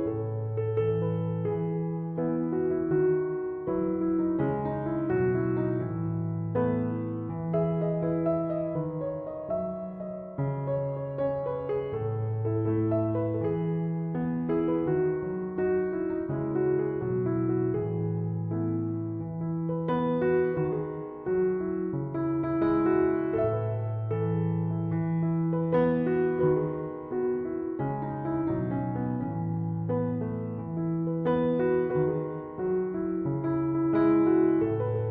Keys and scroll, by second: 15.2 Escape, 21.0 Escape.